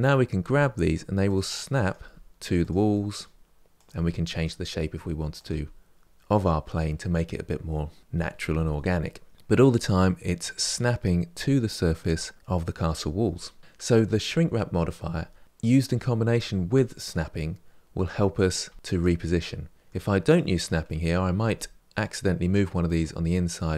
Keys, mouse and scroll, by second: 0.2 g, 1.6 click, 1.7 g, 2.7 middle click, 3.5 click, 3.7 g, 4.5 middle click, 5.1 click, 5.3 g, 6.3-8.0 middle drag, 9.3-11.5 middle drag, 17.1-18.3 middle drag, 18.3 click, 18.4 g, 19.2 middle click, 20.1 click, 20.6 middle click, 21.2 g, 23.1 middle click.